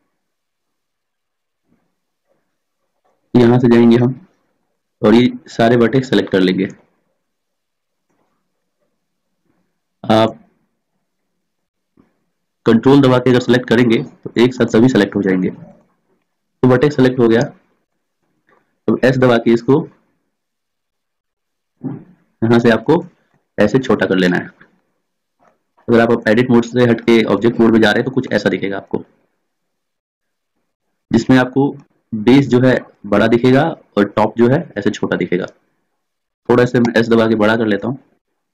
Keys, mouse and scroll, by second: 6.5-9.3 middle drag, 19.6 s, 24.5-25.5 middle drag, 25.9 Tab, 32.0-33.3 middle drag, 37.0 s, 38.4-38.5 drag.